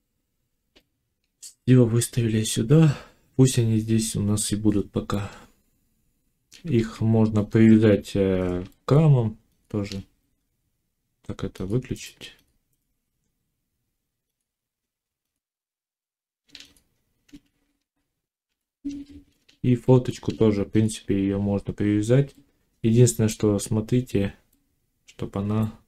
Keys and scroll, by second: 6.6 a, 7.3 Tab, 18.3 ctrl+j.